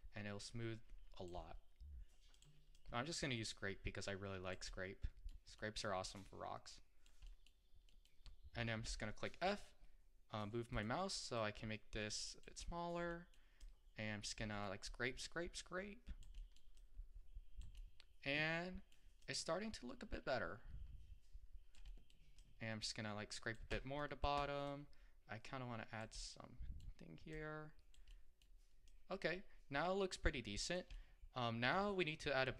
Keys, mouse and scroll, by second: 0.0-4.7 drag, 4.7 scroll down 1, 4.8-6.1 middle drag, 6.1-7.3 drag, 7.3-8.9 middle drag, 8.9 f, 11.4-12.7 drag, 12.7-13.2 scroll up 1, 13.2 middle click, 13.7 click, 14.4-14.9 scroll down 1, 14.9-16.5 drag, 16.5 middle click, 16.8-17.9 drag, 17.9-19.3 middle drag, 19.3-21.9 drag, 21.9 middle click, 22.4-24.1 drag, 24.1 middle click, 24.7-26.3 drag, 26.3-27.4 middle drag, 27.4 click, 28.2 middle click, 28.9-31.0 drag, 31.0-32.5 middle drag.